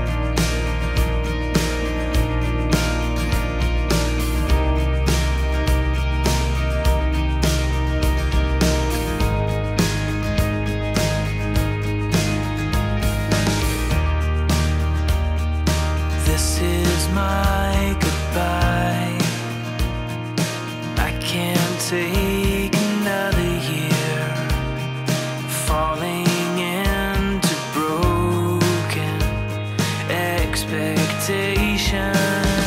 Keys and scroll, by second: 1.4-1.8 scroll, 2.7 super+z, 3.4 super+z, 3.7 super+z, 6.9 super+z, 9.2 super+z, 10.0 super+z, 10.2 super+z, 10.6 super+z, 11.1 scroll, 12.6 super+z, 13.9-14.4 scroll, 15.7 scroll, 16.3 scroll, 18.0 scroll, 18.9-19.7 scroll, 24.1 scroll, 26.0-26.5 scroll, 27.0 scroll, 28.3 scroll, 29.0-29.6 scroll, 32.2 super+z.